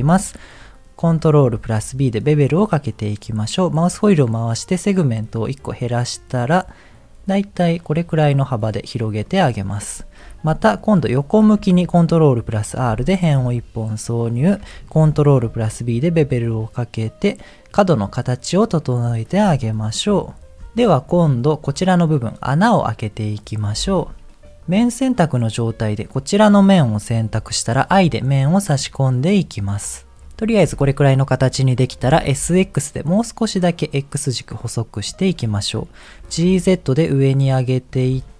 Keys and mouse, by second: 1.5 ctrl+b, 8.2-9.2 middle drag, 11.6 ctrl+r, 13.4 middle click, 15.4 ctrl+b, 20.1 KP_1, 21.0 Tab, 23.8 Tab, 24.8 click, 25.7 click, 32.0 s, 36.2 g, 38.2 shift+middle click.